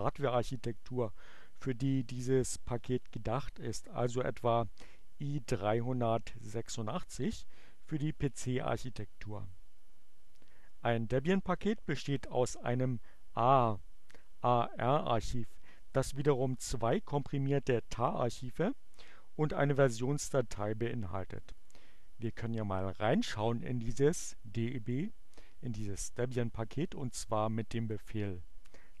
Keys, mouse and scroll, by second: 20.4 click, 27.6-28.5 typing.